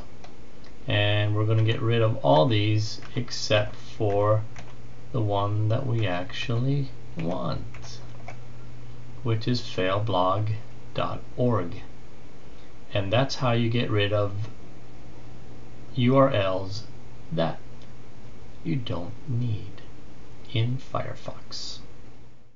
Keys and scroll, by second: 1.4 Delete, 2.2 Delete, 2.8 Delete, 3.4 Delete, 3.9 Delete, 4.4 Delete, 5.8 Delete, 6.2 Delete, 7.0 Delete, 7.6-10.8 Delete.